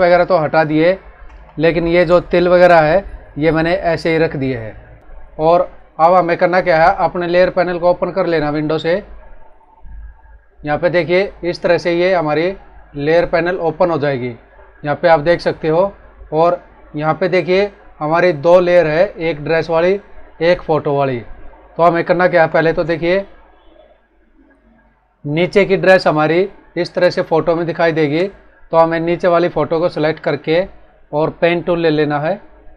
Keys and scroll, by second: 1.4 ctrl+=, 2.0 space, 4.9 ctrl+-, 22.1 ctrl+=, 22.7 space.